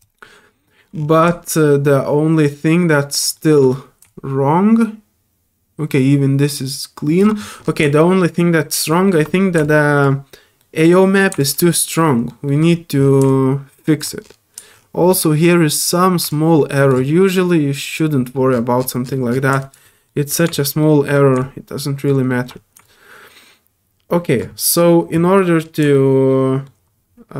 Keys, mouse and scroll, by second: 0.0 click, 0.6 middle click, 0.9-1.3 scroll up 2, 1.3-3.2 drag, 3.3 alt+middle drag, 3.7 scroll up 1, 4.1-7.2 alt+drag, 7.9 alt+click, 9.1 middle click, 9.4 scroll up 1, 9.6 click, 10.6 alt+middle click, 11.4 alt+click, 11.7 alt+middle click, 12.5 alt+middle click, 12.7 alt+scroll up 2, 13.3 alt+click, 14.2 alt+middle click, 14.7 alt+middle click, 15.0 alt+middle click, 16.3 alt+click, 19.0 alt+middle click, 19.6 click, 19.9 middle click, 20.5 alt+click, 20.8 alt+middle click, 21.4 alt+click, 22.3 middle click, 22.8-24.4 drag, 24.6 alt+middle click, 25.6 scroll down 1, 25.9 alt+middle click.